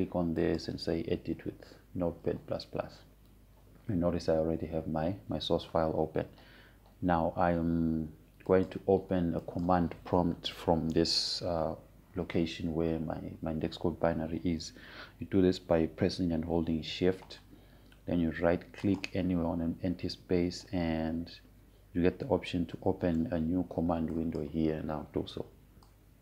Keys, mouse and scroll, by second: 0.9 right click, 2.1 click, 10.2 click, 18.3 click, 20.5 shift+right click, 25.8-26.2 drag.